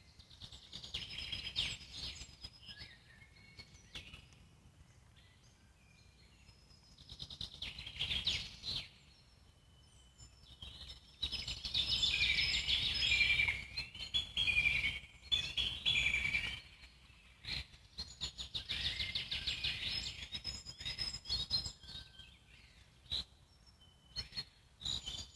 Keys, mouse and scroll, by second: 5.2-6.8 alt+middle drag, 6.8-7.2 scroll down 1, 7.3-9.0 alt+middle drag, 9.0 scroll up 1, 9.3-10.6 alt+middle drag, 10.6-14.5 drag, 14.5 ctrl+z, 15.0-20.5 drag, 20.5 ctrl+z, 20.9 alt+middle click, 21.6 click, 22.4 alt+middle click, 23.4-25.3 drag.